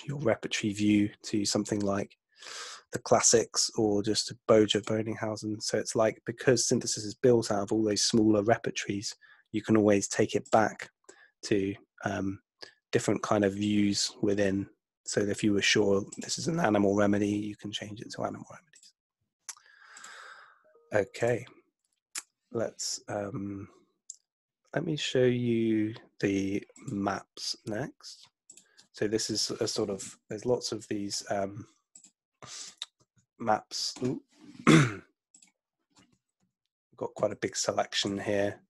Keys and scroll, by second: 30.4 ↺, 36.4 Right, 37.3 Right, 38.2 Right.